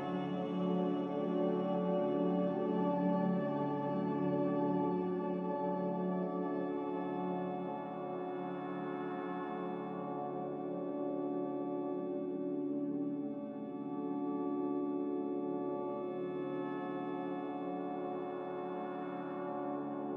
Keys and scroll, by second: 14.9 q.